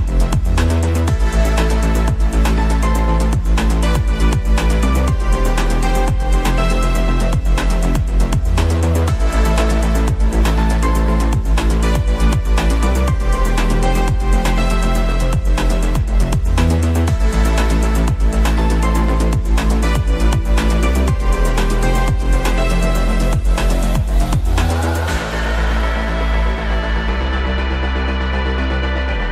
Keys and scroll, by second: 23.6 shift+Page_Down, 24.5 shift+F2, 24.8 Escape, 26.3 F3, 26.8 Escape, 27.7 shift+F2.